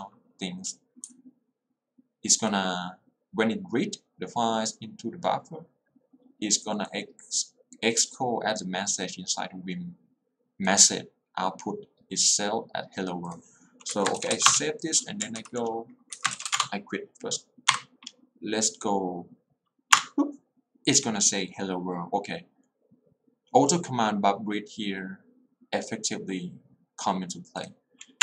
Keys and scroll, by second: 14.0 Escape, 14.4 w, 14.6 Return, 15.5 alt+l, 16.2 Escape, 16.6 Return, 17.7 Up, 20.1 Return.